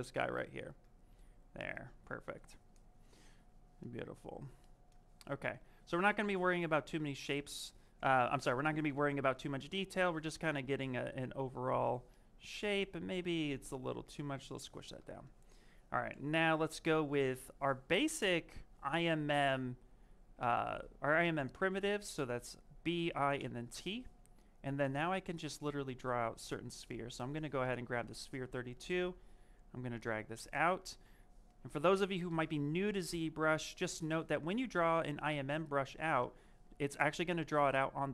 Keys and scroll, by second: 12.4 w, 32.1 w, 34.1 z.